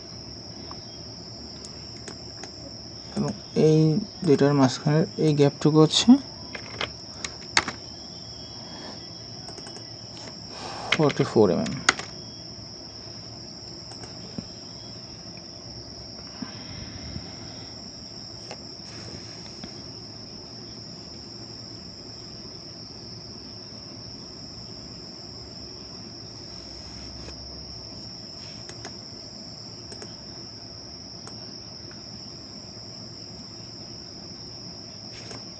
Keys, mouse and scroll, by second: 0.0-2.1 scroll down 1, 2.1 right click, 6.6 typing, 7.6 Return, 9.7 double click, 10.9 typing, 11.9 Return, 28.7 right click.